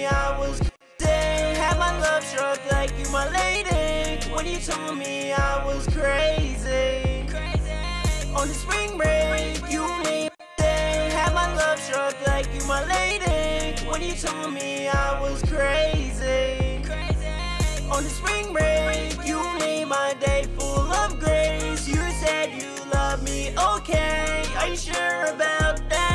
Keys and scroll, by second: 13.1 super+Tab, 17.9 super+Tab, 18.6 super+`, 24.6 ctrl+super+w.